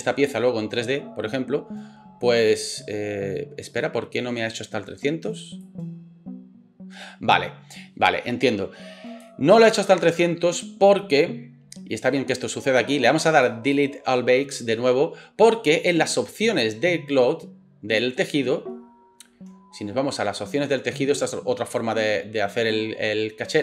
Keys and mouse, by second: 16.6-23.6 middle drag.